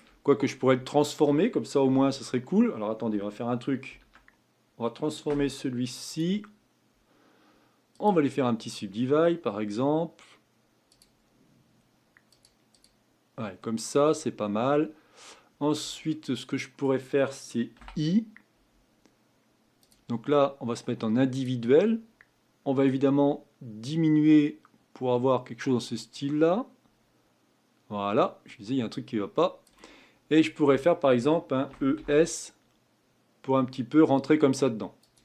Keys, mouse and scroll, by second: 0.2-0.8 scroll up 5, 0.8-1.9 shift+middle drag, 1.9 Tab, 3.9 ctrl+r, 6.1-9.2 right drag, 10.9-13.6 drag, 13.6 middle click, 14.2-16.1 scroll up 2, 16.1-17.8 middle drag, 21.3 click, 22.8-26.0 drag, 31.7 e.